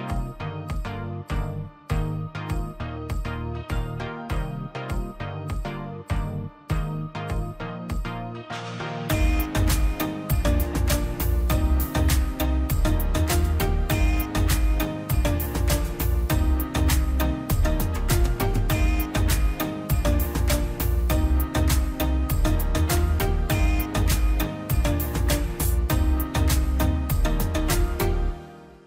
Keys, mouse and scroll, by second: 0.2 click, 0.4 scroll down 1, 0.8 middle click, 1.0-1.7 scroll up 1, 1.7 middle click, 2.6 click, 3.4 scroll up 1, 4.6-8.8 drag, 9.0-9.3 scroll up 1, 9.3 click, 10.5-10.8 scroll up 1, 10.8 click, 11.0-12.0 scroll down 1, 12.3 scroll up 1, 13.8 space, 13.8 click, 14.3 m, 14.9 click, 16.2 space, 16.4 click, 17.1 m, 17.7 click, 18.2-18.9 scroll down 1, 18.9 space, 19.1 scroll up 1, 19.5 ctrl+click, 20.3 m, 21.0 click, 21.1-21.8 scroll down 1, 26.5 click.